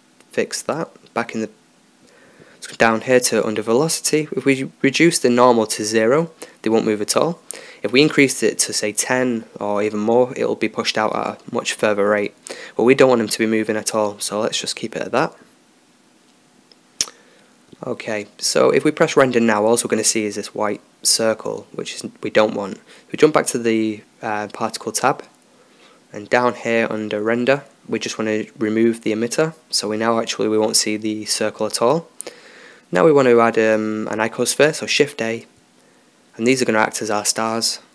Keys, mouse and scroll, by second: 9.8-11.3 drag, 12.2-13.7 drag, 12.9 alt+a, 15.8-22.8 drag, 22.8 Escape, 24.4-26.3 drag, 26.5 middle click, 26.9-30.9 drag, 30.9-33.8 middle drag, 33.8 s.